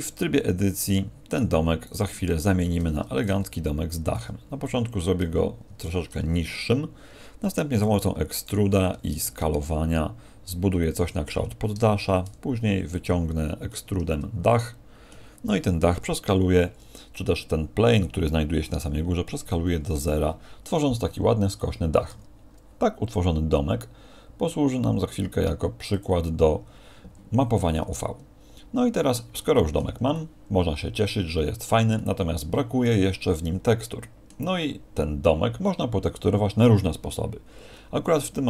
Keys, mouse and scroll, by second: 1.7 right click, 3.1 click, 4.6 middle click, 11.9 e, 13.9 middle click, 29.8 Tab, 29.8 middle click, 30.1 middle click.